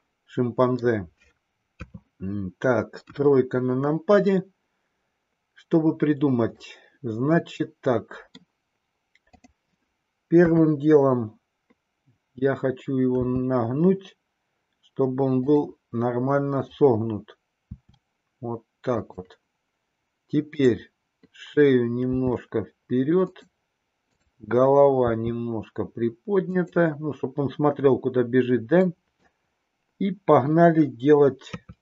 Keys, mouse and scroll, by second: 1.7 KP_3, 3.0 KP_1, 6.5-8.4 middle drag, 9.2-11.1 drag, 11.1 KP_3, 13.2 r, 16.5-17.1 drag, 17.6 r, 20.5-21.0 drag, 22.1 r, 25.0 r, 28.7-29.4 middle drag, 31.4 KP_3.